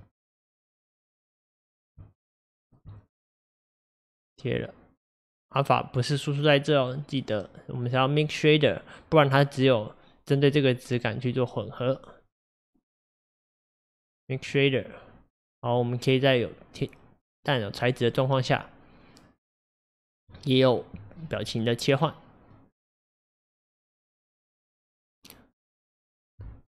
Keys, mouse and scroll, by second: 3.4-11.7 drag, 15.9-18.9 drag, 21.3-26.7 shift+middle drag.